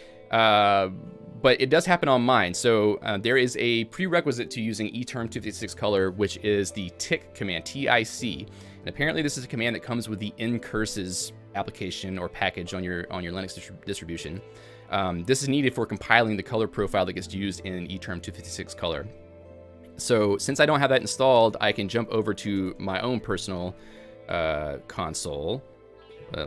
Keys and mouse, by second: 0.7-4.4 typing, 6.8-7.6 typing, 10.0-10.8 typing, 13.2-14.0 typing, 16.1-16.9 typing, 19.3-20.1 typing.